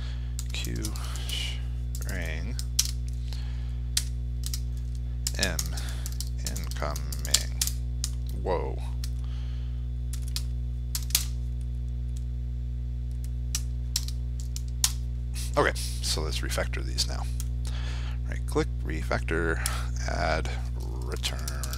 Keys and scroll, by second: 4.0 ctrl+space, 10.8 ctrl+c, 13.8 ctrl+v.